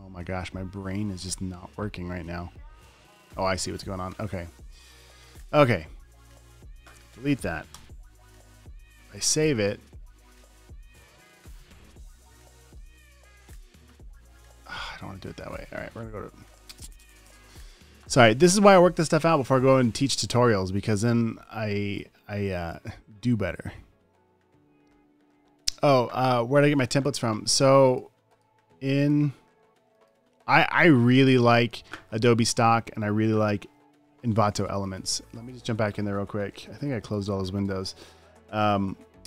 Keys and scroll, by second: 4.6 super+t, 5.6 Return, 8.1 BackSpace, 9.7 super+s, 38.0 super+n.